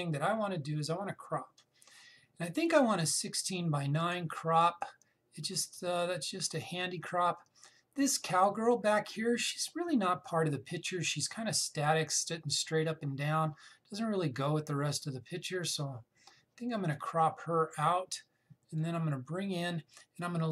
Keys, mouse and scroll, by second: 4.7-17.7 drag, 19.5-20.5 drag.